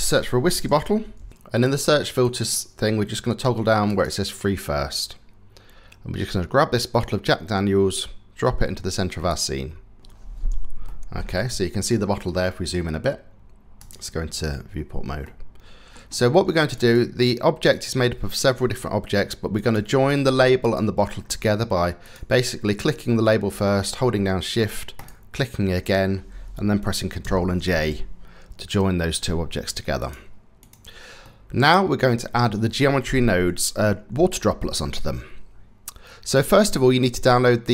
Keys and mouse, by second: 1.3 t, 3.5 click, 10.4-10.8 shift+middle drag, 11.5-11.9 shift+middle drag, 13.5 click, 14.8 click, 16.4 click, 17.3 click, 18.0 click, 19.2 click, 20.2 shift+click, 21.6 click, 22.5 click, 24.6 shift+click, 24.7 shift+middle click, 28.3 ctrl+j, 29.6 click, 30.2 click, 30.8 click.